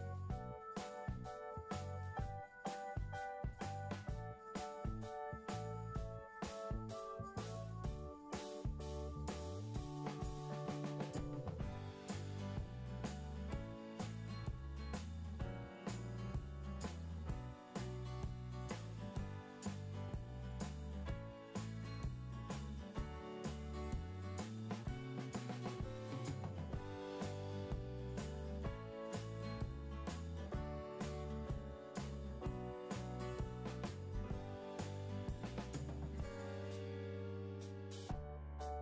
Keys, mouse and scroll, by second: 28.3 Escape, 28.5 Escape, 32.1 Delete.